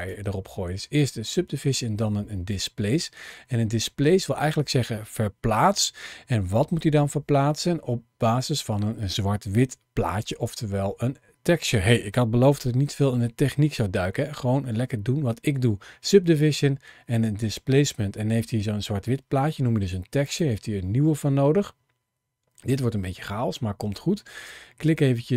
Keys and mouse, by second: 3.6 middle click, 6.5 middle click, 20.1 click.